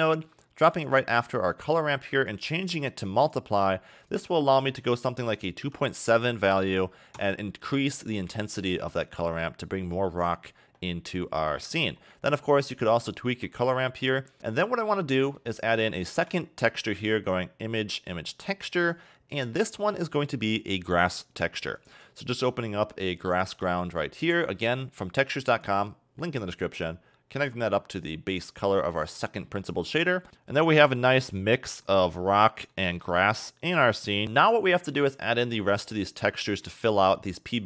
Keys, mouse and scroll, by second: 1.4-2.3 scroll down 2, 2.3 click, 4.1 click, 11.6 middle click, 11.9-13.0 scroll up 4, 13.0 ctrl+shift+click, 14.4 middle click, 14.9 middle click, 16.0 shift+a, 20.2 click, 27.5 click, 29.2 click, 30.3 shift+middle click, 30.3 scroll up 2, 31.0 middle click, 31.6 middle click, 32.7 middle click, 33.7-34.2 scroll up 3, 34.2 shift+middle click, 34.7 scroll down 2, 34.8 middle click, 35.9 click, 36.5 middle click, 37.2 click.